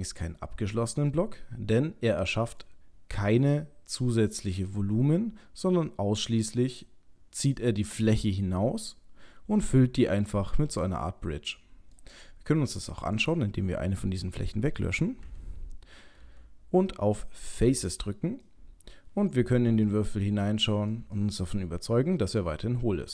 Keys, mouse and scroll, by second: 0.9 middle click, 5.7 middle click, 6.8 middle click, 10.2 middle click, 13.2 click, 15.2 Delete, 16.2 Delete, 18.4 middle click, 19.9 ctrl+middle click, 21.2 middle click.